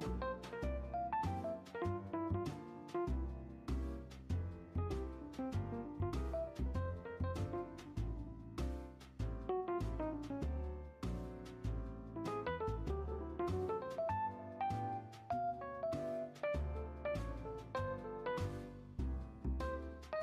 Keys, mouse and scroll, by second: 3.9-5.0 middle drag, 5.0 scroll up 1, 5.1-6.1 middle drag, 6.1 r, 10.3-12.0 middle drag, 12.0 scroll down 1, 12.1-14.0 middle drag, 14.0 scroll up 1, 14.3-15.4 middle drag, 15.4 r, 18.4-20.2 middle drag.